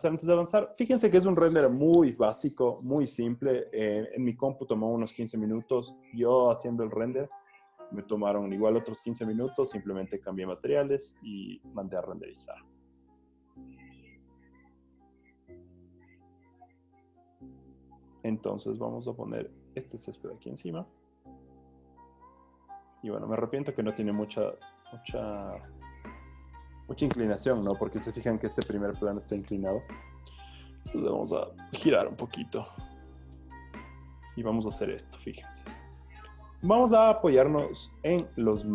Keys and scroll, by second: 20.5 v, 24.3 super+t, 33.9 Return.